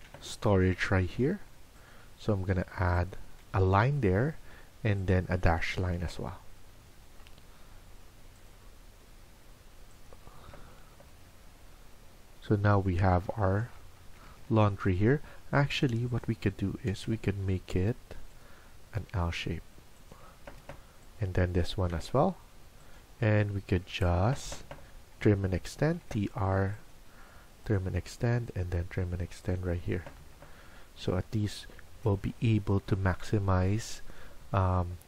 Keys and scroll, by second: 0.0-0.4 typing, 3.2 Escape, 3.4 Escape, 10.8 Escape, 13.9 Escape, 14.2 Escape, 14.3 Escape, 16.5-17.4 typing, 20.2 Escape, 20.5 Escape, 21.6 typing, 24.1 Escape, 24.3 Escape, 24.5 Escape.